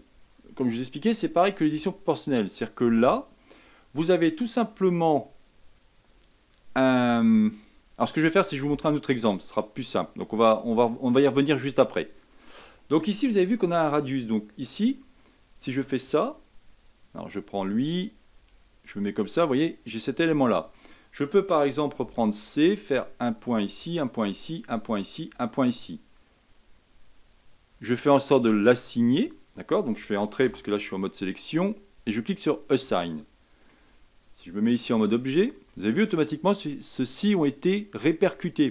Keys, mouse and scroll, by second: 8.7-9.5 middle drag, 9.5 scroll down 2, 10.0-11.9 middle drag, 11.9 scroll up 1, 14.0 click, 15.7 Tab, 16.8 click, 18.5 Tab, 19.3-22.0 middle drag, 22.0 c, 31.9-33.0 drag, 33.0-34.9 middle drag, 34.9 Tab, 35.7-38.7 middle drag.